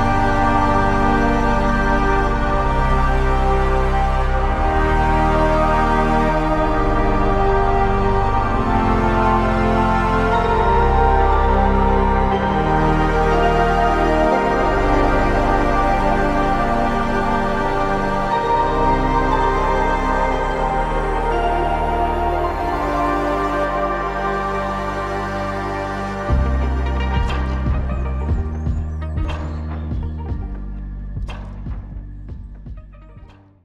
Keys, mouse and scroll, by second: 7.1 shift+click, 16.2 shift+click, 22.0 shift+click, 23.4 shift+click, 24.6 shift+click, 26.8 alt+click.